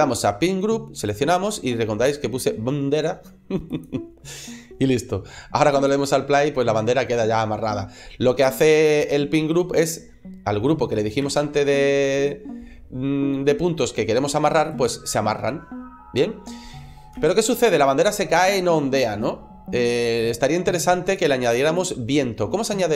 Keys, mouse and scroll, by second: 2.6 click, 11.0 click, 12.6 space, 14.6 click, 17.0 space, 20.9 click, 21.6 click, 22.0-22.7 scroll down 2.